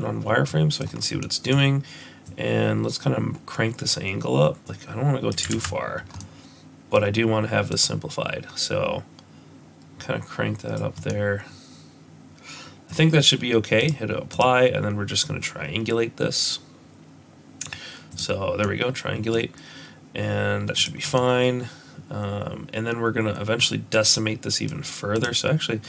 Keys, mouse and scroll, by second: 0.5 middle click, 0.8 middle click, 0.9 scroll up 2, 1.2 middle click, 2.3 click, 5.7 ctrl+z, 6.0 scroll down 1, 6.2 middle click, 7.7 click, 11.1 middle click, 13.8 click, 14.3 click, 18.6 middle click, 20.8 click, 21.2 middle click, 25.2 click.